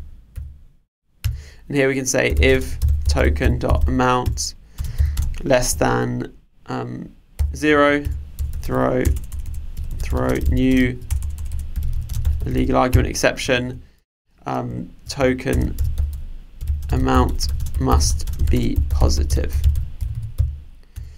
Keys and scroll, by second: 4.2 Return, 13.0 Return.